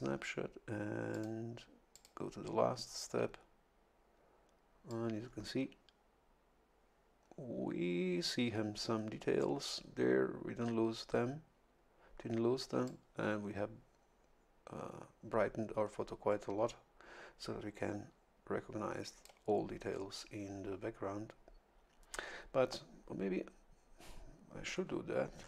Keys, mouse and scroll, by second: 1.1 click, 1.9 click, 4.9-9.9 drag, 12.8-21.1 drag.